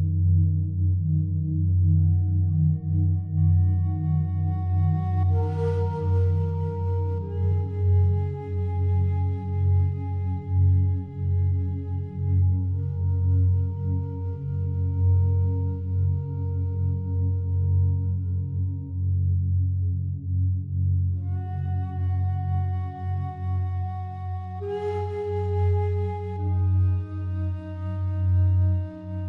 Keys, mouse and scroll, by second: 0.0 right click, 0.9 r, 1.3 y, 3.8 Return, 4.9-10.2 alt+drag, 12.3-15.8 drag, 15.8 s, 16.0 x, 19.4 click, 19.9-24.3 alt+drag, 24.3 s, 25.9 click.